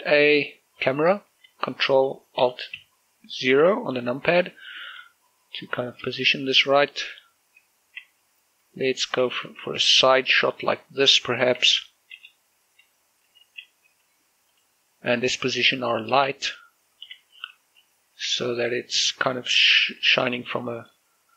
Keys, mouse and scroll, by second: 0.9 click, 5.9 shift+f, 7.7-10.1 typing, 11.2-13.9 typing, 14.6 click, 15.0-15.5 scroll down 1, 15.5 right click, 16.4 shift+space, 17.5 scroll down 1, 18.3 r, 19.6 click, 20.1 r, 20.9 click, 21.0 g.